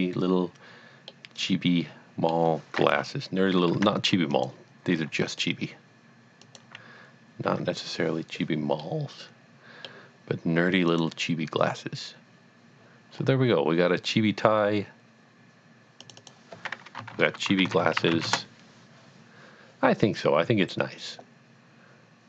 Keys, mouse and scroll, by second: 1.1 middle click, 2.9 KP_7, 3.8 Tab, 4.3 click, 5.0 g, 6.4 click, 7.5 Tab, 8.8 middle click, 10.9 click, 13.2 scroll down 1, 16.0 click, 16.2 double click, 17.1-18.1 typing, 18.3 Return.